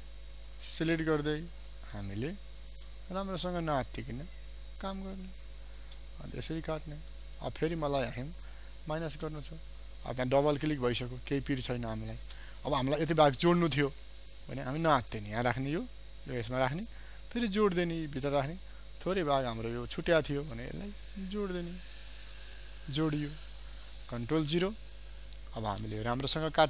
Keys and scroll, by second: 8.4 alt+space, 10.1 ctrl+alt+space, 24.6 ctrl+0.